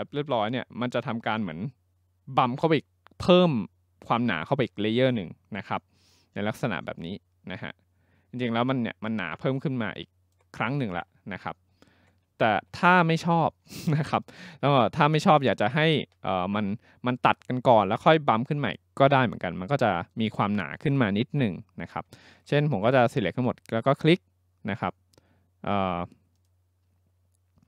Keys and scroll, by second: 12.5 ctrl+z, 15.0 ctrl+z, 15.9 ctrl+z.